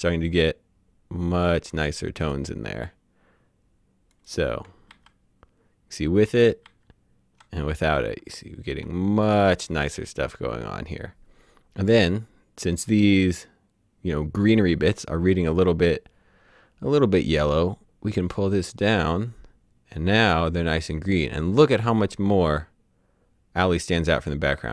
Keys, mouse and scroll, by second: 4.2 click, 5.0 ctrl+z, 6.3 ctrl+shift+z, 6.7 ctrl+shift+z, 8.0 z, 18.2 click.